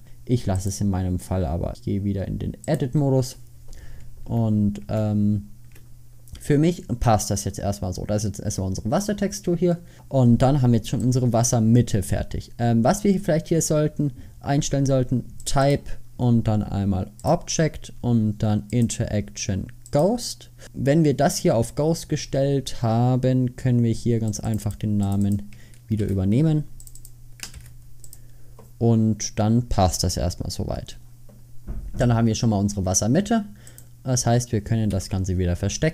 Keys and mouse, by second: 4.3 Tab, 5.7 Tab, 6.1 Tab, 9.4 middle click, 11.1-13.4 drag, 15.5-18.5 drag, 18.8-20.7 drag, 24.4-27.1 drag, 35.0 h.